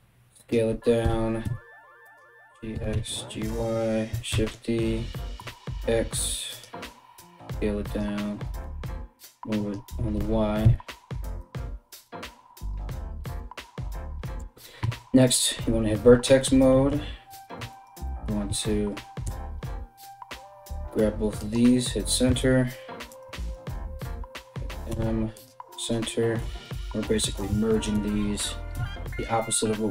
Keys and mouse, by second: 0.6 g, 2.3 g, 3.9 shift+d, 6.8 s, 8.0 g, 9.7 g, 14.5 1, 16.9 right click, 17.3 shift+right click, 18.8 m, 21.9 z, 22.7 right click, 23.0 right click, 24.5 m, 27.0 shift+right click, 28.3 m, 29.6 click, 29.6-29.9 shift+middle drag.